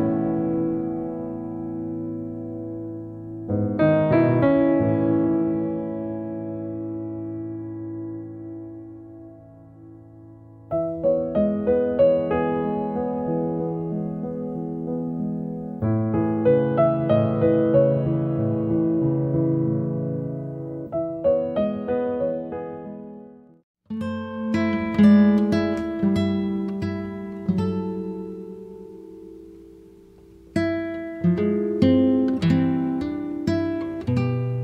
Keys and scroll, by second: 1.5 space, 4.8 m, 14.2 space, 15.3 m, 23.0 space.